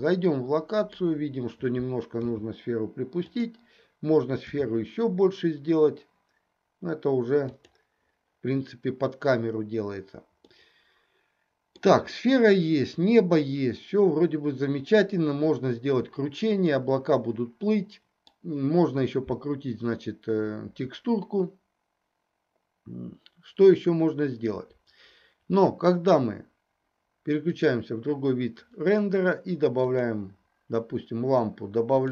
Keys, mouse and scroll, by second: 0.1-1.2 middle drag, 2.2 g, 4.5 s, 10.6-11.8 middle drag, 12.1-18.3 middle drag, 28.0 click, 29.8 click, 32.0 click.